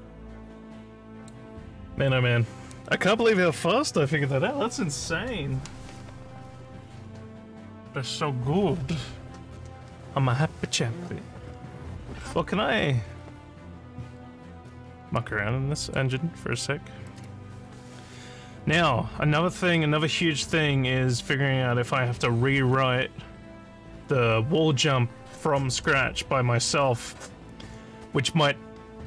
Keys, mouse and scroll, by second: 1.1 click, 15.8 click.